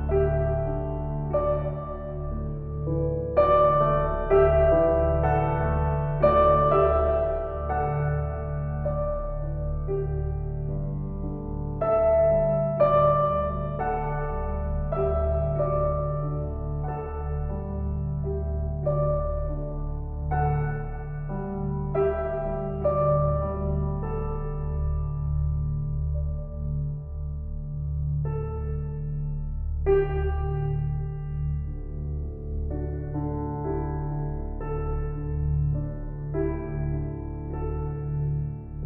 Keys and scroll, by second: 23.4 shift+s, 24.6 s, 26.6 shift+s.